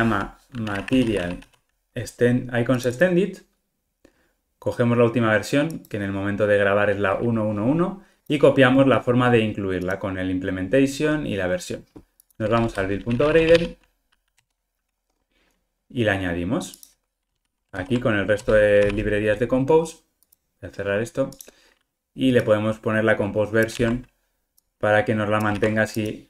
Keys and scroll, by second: 18.8 super+v, 23.7 super+c.